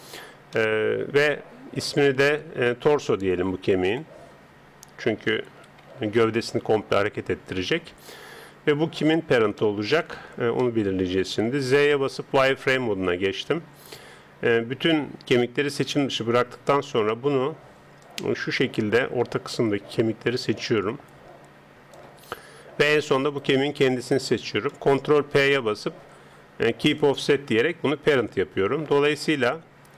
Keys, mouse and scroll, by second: 1.9 Tab, 3.9 click, 8.3 Tab, 9.0-10.7 middle drag, 11.3 middle click, 11.3 z, 14.0 a, 16.2 c, 23.3 right click, 25.3 ctrl+p, 28.2 Tab, 29.4 z, 29.7-29.9 middle drag.